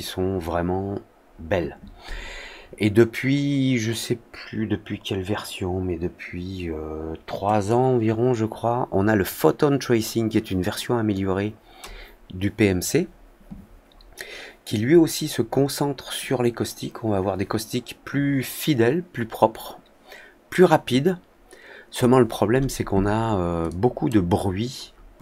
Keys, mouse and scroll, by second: 7.6-11.7 drag, 23.6-24.0 drag, 25.1 click.